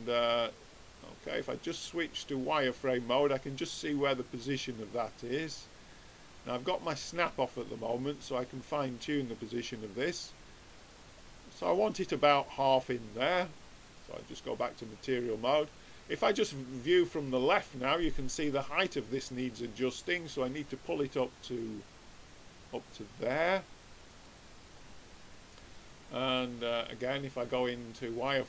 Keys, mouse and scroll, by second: 1.7-3.5 drag, 4.8-6.3 drag, 9.7-11.1 drag, 13.8-15.5 drag, 15.8-17.5 drag, 20.1-21.8 drag, 24.7-26.4 middle drag, 26.4-28.4 drag.